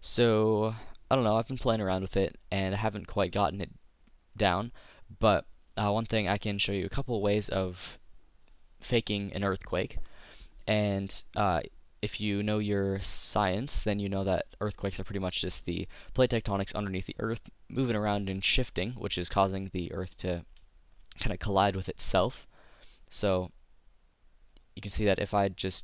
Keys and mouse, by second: 23.2-24.4 drag, 24.8 click, 25.0 middle click, 25.7 click.